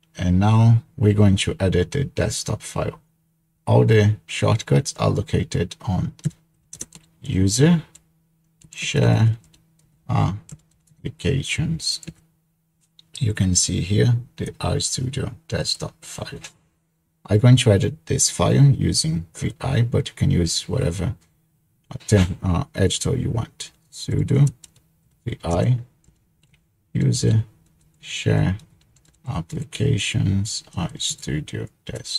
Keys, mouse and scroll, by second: 6.3-11.2 typing, 12.1 Tab, 12.8 typing, 14.5-16.6 drag, 16.4-18.0 typing, 23.8-30.0 typing, 30.7 Tab, 31.7-32.1 typing.